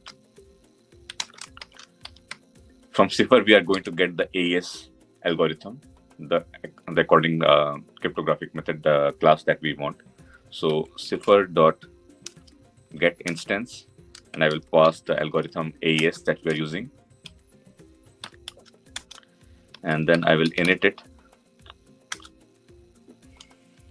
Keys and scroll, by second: 13.1 Return, 21.9 Return.